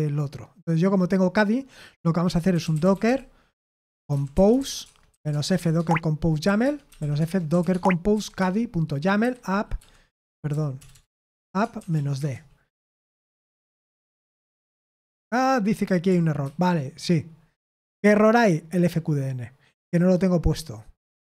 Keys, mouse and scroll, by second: 2.2-12.4 typing, 16.4 ctrl+c, 21.1-21.2 typing.